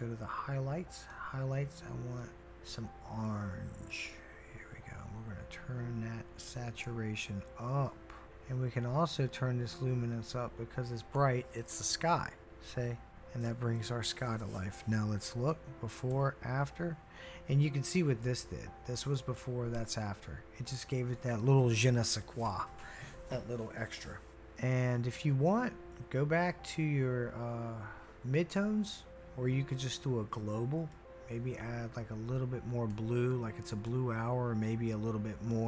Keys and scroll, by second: 15.5-16.1 typing.